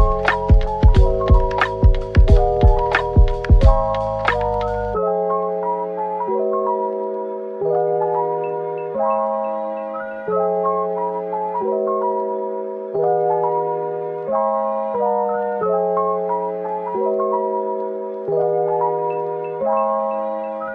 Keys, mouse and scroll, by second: 0.4 typing, 3.2-4.0 typing, 5.8-6.5 typing, 8.0-10.1 typing, 11.8 typing, 13.6-14.6 typing, 16.0-17.2 typing, 19.5 double click, 19.8 middle click.